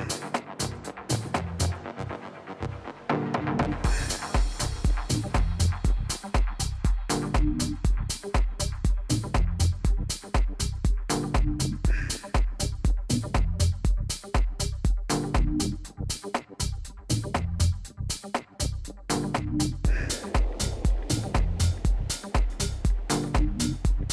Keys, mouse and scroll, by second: 0.0-3.5 typing, 9.0-11.0 drag.